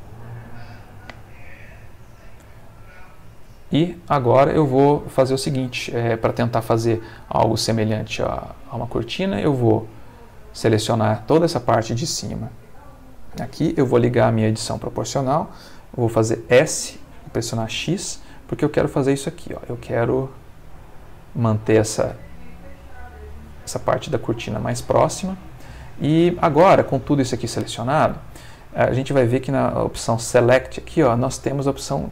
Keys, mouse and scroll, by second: 0.5-2.7 ctrl+middle drag, 2.8 ctrl+middle click, 6.6 middle click, 8.3 click, 9.5-11.1 drag, 14.1 o, 16.4 s, 17.6 x, 18.4-18.9 scroll up 1, 19.0-19.5 scroll down 1, 23.6 click, 24.0-25.6 middle drag, 25.8-27.1 ctrl+shift+middle drag, 29.8 click.